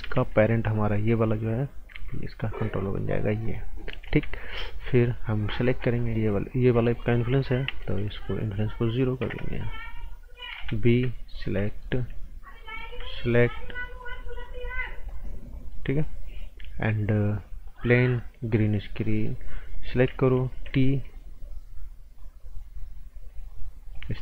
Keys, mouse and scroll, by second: 0.0 b, 0.7 click, 1.9 p, 2.8 click, 3.2 scroll down 1, 3.4 right click, 3.8 scroll down 1, 4.0 z, 4.3 right click, 5.4 click, 5.9 shift+click, 7.6 s, 8.4 click, 9.2 KP_0, 9.4 KP_Enter, 10.5 b, 11.3 shift+click, 11.6 right click, 12.8 shift+click, 13.1 right click, 14.0 shift+click, 14.7 scroll up 1, 15.7 right click, 17.6 click, 19.0 right click, 19.7 click, 20.5 t, 20.8 scroll up 1, 22.1 click, 24.1 scroll down 1.